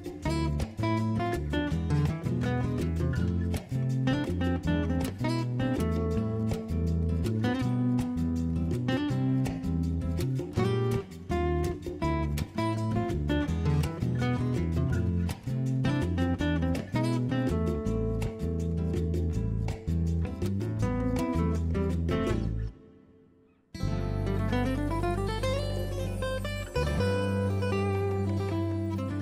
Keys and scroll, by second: 12.4-12.7 typing.